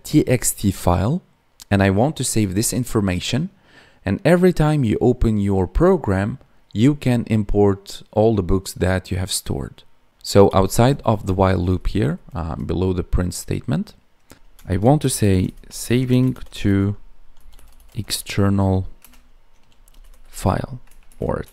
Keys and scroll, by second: 10.5 ctrl+Down, 14.9 space, 16.0 space, 16.4 space, 18.9 space, 21.0 ctrl+Left.